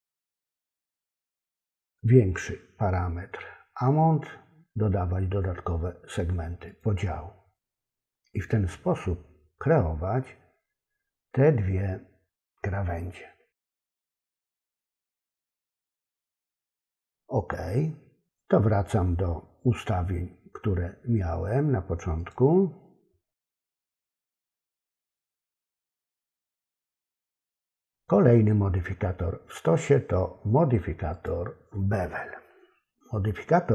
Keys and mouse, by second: 6.8 click, 22.2 click, 23.7 click, 26.3 click, 31.1 click.